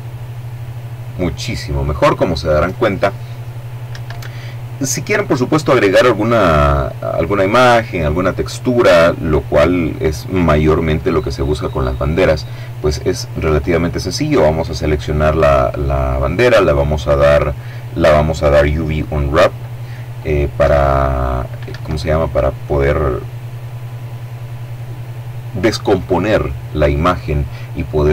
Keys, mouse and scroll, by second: 3.2 Escape, 12.8 right click, 14.0-15.7 middle drag, 19.9 u, 20.9 Escape.